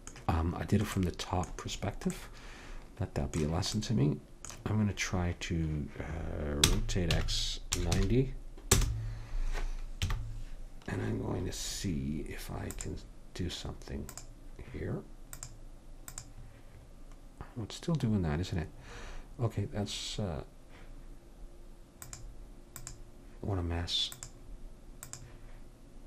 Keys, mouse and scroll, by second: 6.7 r, 10.1 KP_1, 12.7-18.9 drag, 18.9 middle click, 22.1-26.0 drag.